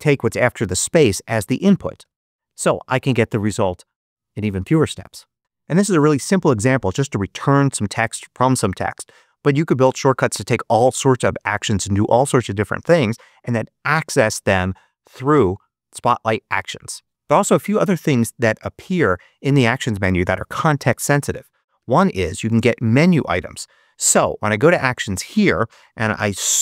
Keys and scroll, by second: 2.0 Return, 21.9 super+space, 22.5 super+3, 25.8-26.6 typing.